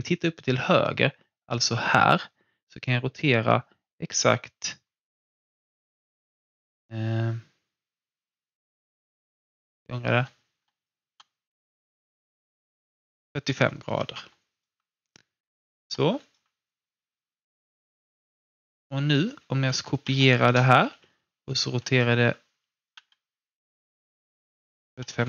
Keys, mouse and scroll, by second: 9.7 ctrl+z, 10.8-13.6 drag, 14.1 w, 14.3 alt+click, 15.8 ctrl+z, 16.2-20.0 alt+drag, 20.0 ctrl+d, 20.9 e, 25.1 w.